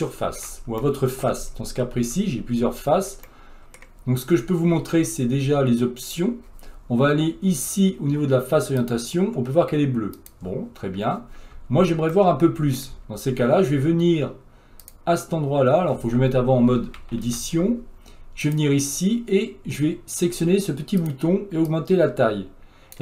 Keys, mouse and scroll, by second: 1.5 scroll up 2, 1.8 scroll down 1, 2.0 Tab, 2.7 Tab, 3.3-8.8 middle drag, 8.8-11.5 drag, 11.5 Tab, 12.4 middle click, 12.9 Tab, 21.0 click.